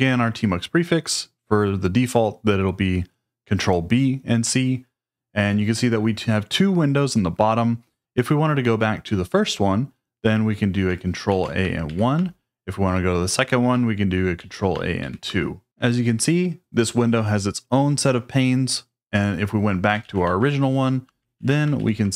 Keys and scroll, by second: 11.3 ctrl+a, 11.8 1, 14.4 ctrl+a, 15.0 2, 20.1 ctrl+a, 21.4 ctrl+a, 21.8 1.